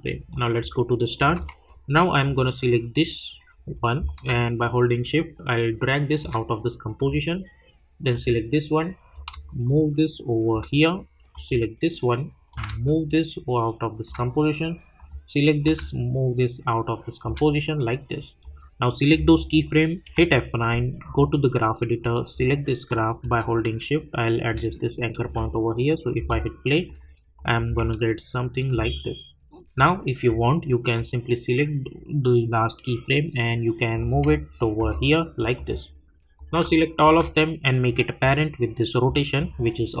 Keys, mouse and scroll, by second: 20.0 F9, 21.0-23.4 drag, 26.8 click, 27.6 space, 29.7-34.1 drag, 34.1 space, 35.5 click, 37.0-40.0 shift+drag.